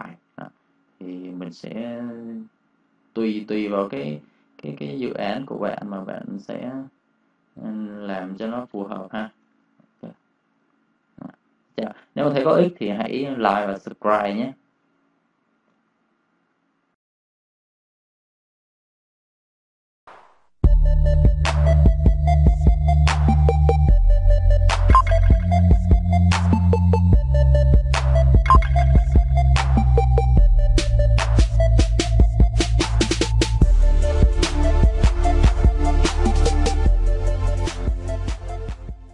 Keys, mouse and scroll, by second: 2.6 v, 2.7 click, 3.7 ctrl+click, 5.5 ctrl+click, 7.9 ctrl+1, 8.4 space, 8.5 click, 9.5 ctrl+z, 10.3 click, 10.5 space, 10.6 click, 15.4 click.